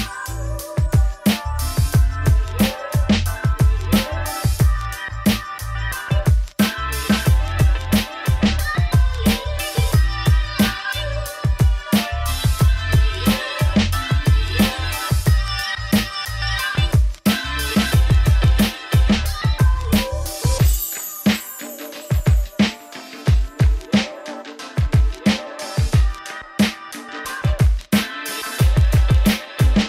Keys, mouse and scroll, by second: 0.0 click, 0.2 scroll down 1, 0.4-2.4 middle drag, 2.4 scroll down 1, 2.5-2.8 scroll up 3, 2.8 shift+click, 3.1 x, 3.5 shift+click, 3.7 shift+middle click, 4.2-4.5 scroll up 1, 4.5 s, 5.2 ., 5.7-6.9 middle drag, 6.9 shift+click, 7.3 s, 8.3 s, 9.5 middle click, 9.9 g, 10.4 g, 11.1-11.5 scroll up 1, 11.5 click, 11.7 scroll down 1, 11.9 shift+click, 12.4 x, 12.8 click, 13.1 ], 13.5 middle click, 13.9 alt+d, 14.7 click, 14.8 r, 15.9 scroll down 1, 16.1 middle click, 16.8 scroll up 1, 17.0 shift+middle click, 17.3 click, 17.5 right click, 18.2 shift+middle click, 18.8 scroll up 3, 20.1-20.4 scroll down 2, 20.4 shift+click, 20.8 ctrl+l, 21.2 click, 21.5 scroll up 1, 21.7 middle click, 22.3-22.9 scroll up 1, 22.9 Tab, 23.0 2, 23.2 alt+click, 23.5 alt+click, 24.0 alt+click, 24.3-26.4 alt+drag, 26.4 middle click, 26.6 Tab, 27.5 click, 28.0 click, 28.4 Tab, 28.7 middle click, 29.4 click.